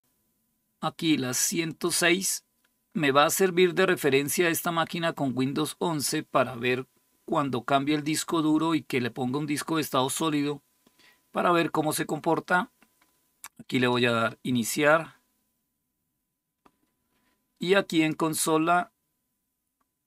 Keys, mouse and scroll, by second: 1.5 click, 13.5 click, 17.7 click.